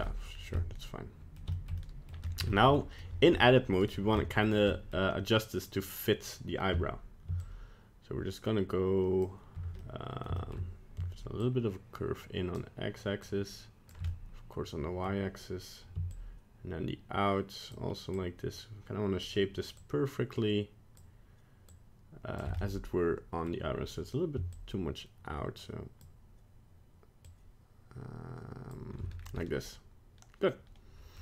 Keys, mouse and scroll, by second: 0.0 middle click, 0.2 middle click, 0.3 scroll down 1, 0.5 middle click, 1.3 middle click, 1.5 shift+middle click, 1.8 middle click, 2.2 scroll up 1, 2.5 shift+middle click, 2.7 middle click, 3.3 scroll up 1, 3.8 right click, 4.1 middle click, 4.7 middle click, 7.4 shift+click, 9.7 middle click, 10.3 shift+middle click, 11.4 shift+click, 13.2 shift+click, 14.0 middle click, 16.1 shift+click, 18.3 shift+click, 19.7 shift+click, 21.6 shift+click, 22.5 middle click, 24.5 shift+click, 27.2 shift+click, 29.1 scroll down 1, 29.4 middle click.